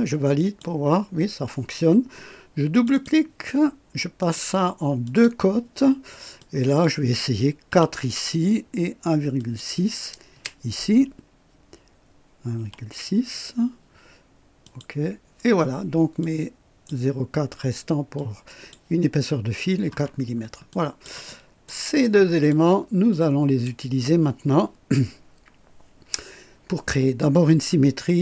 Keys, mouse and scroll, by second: 0.4 click, 2.7 click, 4.2 click, 5.0 click, 6.4 click, 7.7 KP_4, 9.4 click, 10.3 BackSpace, 12.5 KP_6, 14.6 click, 16.2-17.0 drag, 18.1-18.9 drag, 20.1-20.4 scroll down 1, 20.7 click, 21.3-21.8 right drag, 22.5-23.8 drag.